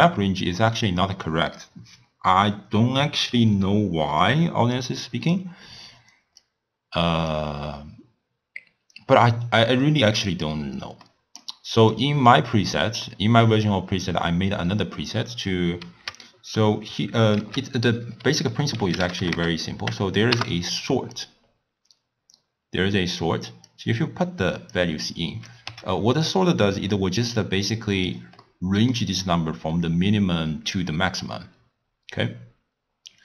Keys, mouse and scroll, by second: 6.4-9.5 drag, 11.0-11.9 middle drag, 11.9 click, 13.0-16.1 middle drag, 17.4 ctrl+a, 23.7 click, 25.0 click, 25.7 w, 28.5-31.5 middle drag.